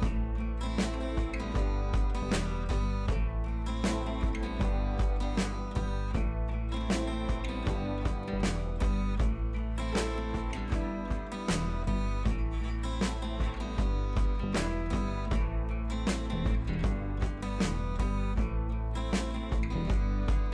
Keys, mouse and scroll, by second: 0.6 ctrl+c, 1.1 click, 1.6 ctrl+v, 2.2 click, 2.7-3.0 alt+drag, 5.0 ctrl+c, 5.3 click, 5.7 ctrl+v, 6.5 click, 8.9 ctrl+t, 9.5-9.9 alt+drag, 10.9-13.4 drag, 13.5 ctrl+t, 13.8-14.5 alt+drag, 15.5 ctrl+a, 16.1 click, 16.7 ctrl+d, 18.0 click, 18.2 Down, 18.9 right click, 19.5-20.5 drag.